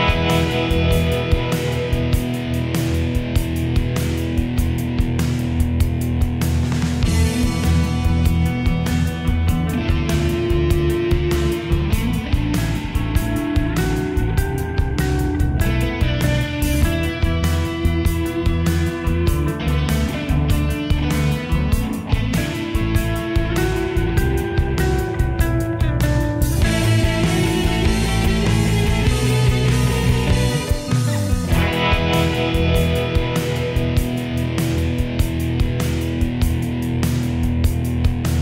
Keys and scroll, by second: 10.1 ctrl+j.